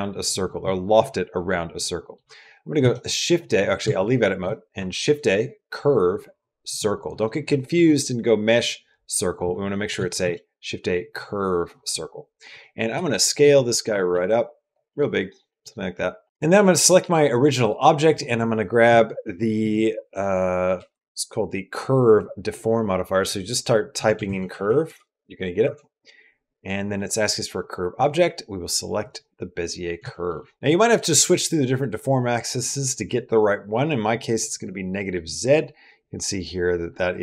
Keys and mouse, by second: 1.6 middle click, 2.6 shift+a, 3.6 Tab, 4.0 middle click, 4.6 shift+a, 7.7 shift+a, 10.0 shift+a, 12.4 middle click, 12.8 s, 13.9 s, 14.7 middle click, 15.3 middle click, 16.0 middle click, 16.2 s, 16.4 shift+middle click, 17.9-25.5 drag, 24.1 BackSpace, 29.9 shift+middle click, 30.2 middle click, 30.5 click, 31.8-34.1 drag, 34.7 middle click, 35.4-37.2 middle drag.